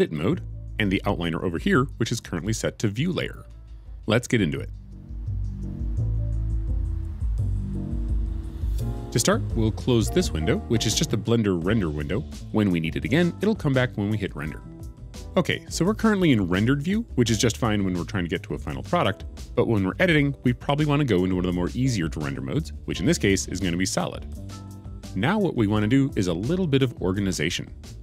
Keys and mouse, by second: 27.9 middle click.